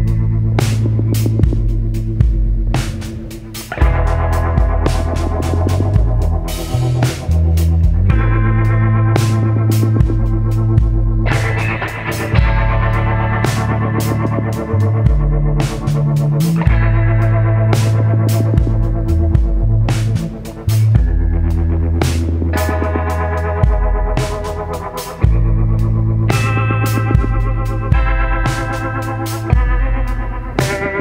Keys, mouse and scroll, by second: 1.0 click, 2.5 click, 4.4 click, 9.5 ctrl+d, 13.9 ctrl+0, 18.3 shift+click, 19.7 click, 21.5 click, 23.8 click, 25.3 click, 26.8 click, 28.3 click, 29.4 click, 30.7 click.